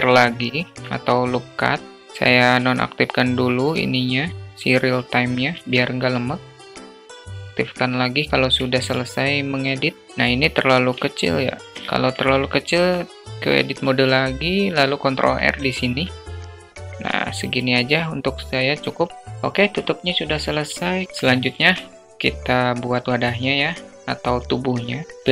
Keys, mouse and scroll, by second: 3.6 click, 4.3 ctrl+r, 7.0 click, 7.5 Tab, 7.5-9.5 alt+middle drag, 10.0-11.2 alt+middle drag, 11.6 alt+middle drag, 12.7 Tab, 14.5 ctrl+r, 16.9 alt+Tab, 16.9-17.3 alt+middle drag, 17.8-19.0 alt+middle drag, 21.0 shift+a, 25.1 shift+middle click.